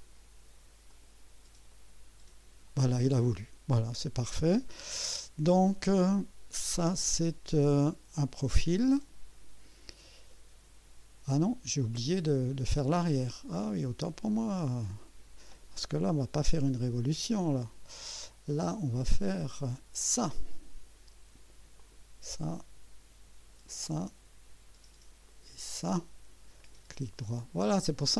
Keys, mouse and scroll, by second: 0.9 click, 1.7 right click, 13.3 right click, 15.5 click, 16.4 Delete, 20.0 click, 21.8 click, 23.7 click, 25.2 click, 26.6 middle click.